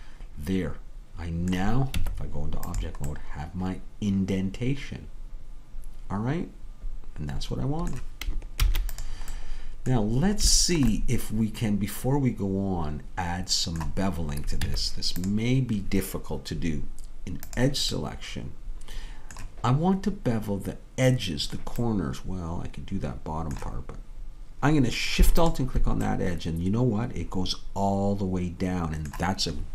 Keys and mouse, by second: 2.0 Tab, 8.7 ctrl+s, 14.7 Tab, 17.7-22.0 drag, 22.0 middle click, 22.7-27.7 middle drag.